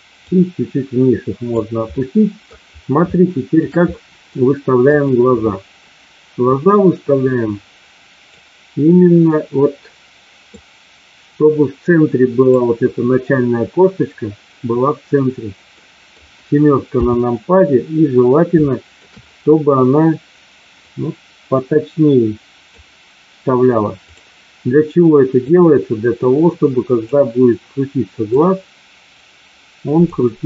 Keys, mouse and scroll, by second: 0.4-1.4 drag, 1.9 middle click, 3.1 shift+middle click, 3.9 middle click, 4.9 click, 6.5-8.3 drag, 10.4-12.5 drag, 15.8 middle click, 16.9 KP_7, 18.6 shift+middle click, 20.8-22.8 drag, 24.0 click, 25.4-27.1 drag, 28.4-30.0 drag.